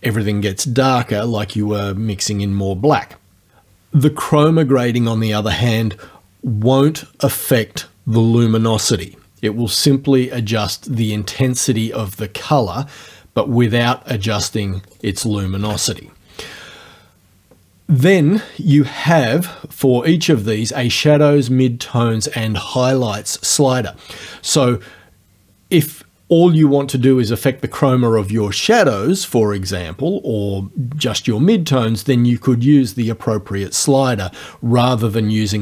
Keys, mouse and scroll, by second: 10.4-15.2 drag, 14.9 right click, 15.5 KP_0.